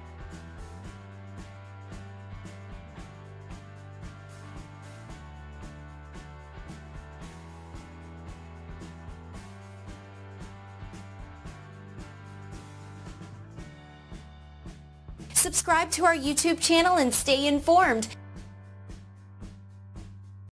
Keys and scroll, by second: 0.9 Return, 4.5 Left, 8.1 Return, 10.8 Return.